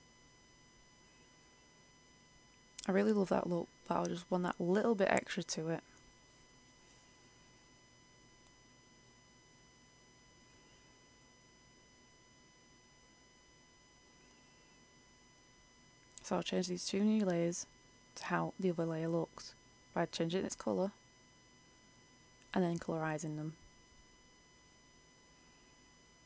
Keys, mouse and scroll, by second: 0.5 click, 0.7 F8, 2.4-3.3 scroll down 1, 3.5-7.3 drag, 7.3 scroll up 1, 9.1-26.2 drag.